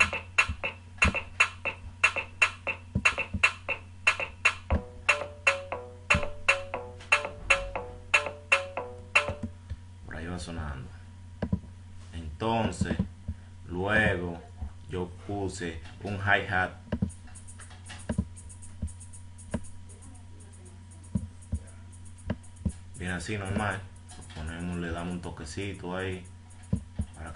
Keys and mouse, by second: 3.3 F1, 3.3 right click, 9.1 click, 13.4 F1, 13.7 F6, 14.2 F5.